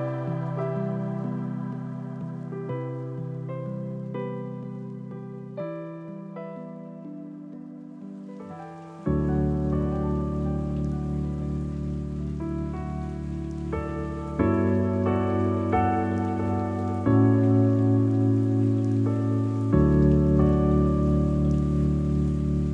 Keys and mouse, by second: 2.3-3.0 middle drag, 4.3-4.6 shift+middle drag, 5.2 g, 5.4 y, 7.6 middle click, 12.3-14.2 middle drag, 15.1 g, 15.4 z.